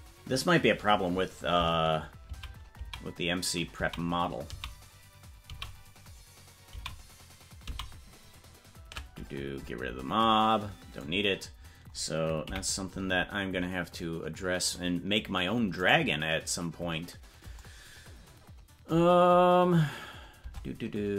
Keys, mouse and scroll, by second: 9.4 ctrl+z, 9.4-10.3 scroll down 16, 12.4 KP_Decimal, 14.7 right click, 15.9 right click, 20.4 Tab.